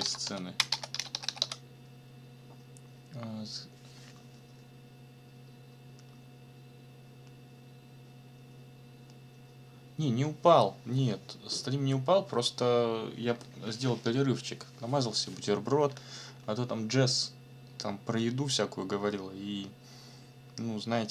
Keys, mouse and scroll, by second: 0.0-1.9 typing.